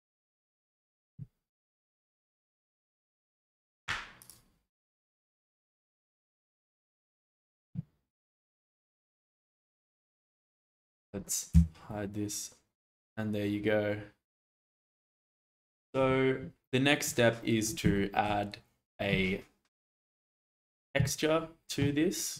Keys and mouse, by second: 8.8 shift+middle click, 9.3-10.1 middle drag, 10.3 click, 10.7 shift+middle drag, 11.5 h, 11.9-14.9 middle drag, 17.1-17.6 middle drag, 17.9-18.2 shift+middle drag.